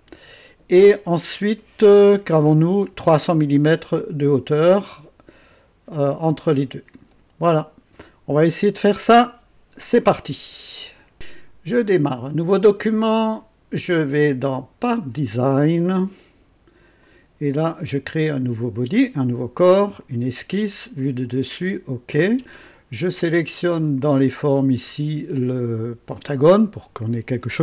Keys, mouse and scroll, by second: 11.0 right click, 11.1 ctrl+s, 12.6 click, 14.9 click, 17.0 click, 18.7 click, 20.0 click, 21.0 click, 21.6 click, 23.8 click, 26.2 click.